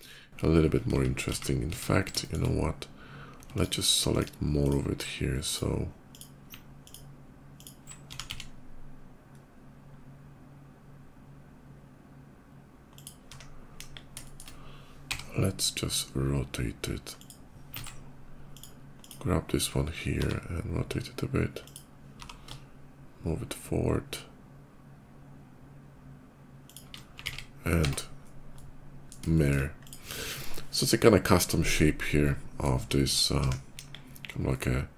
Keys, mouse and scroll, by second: 0.7 ctrl+z, 1.2 ctrl+z, 1.6 ctrl+z, 2.0 shift+middle click, 2.3 shift+middle click, 3.4 click, 3.9 ctrl+click, 4.5 ctrl+click, 5.3 ctrl+click, 5.8 ctrl+click, 6.6 ctrl+click, 7.4 ctrl+click, 7.8 s, 8.1 x, 10.0 middle click, 10.2 middle click, 10.6 middle click, 12.7 click, 13.6 KP_5, 14.1 middle click, 14.9 r, 17.0 click, 17.7 ctrl+z, 18.2 click, 18.8 click, 20.0 r, 21.3 click, 21.8 g, 22.5 shift+g, 26.5 shift+click, 27.0 alt+x, 27.6 Tab, 27.7 alt+x, 28.4 middle click, 29.2 middle click, 29.6 shift+click, 29.8-32.4 shift+middle drag, 32.8 shift+middle click, 33.6 KP_5, 34.1 scroll down 1, 34.2-34.9 middle drag.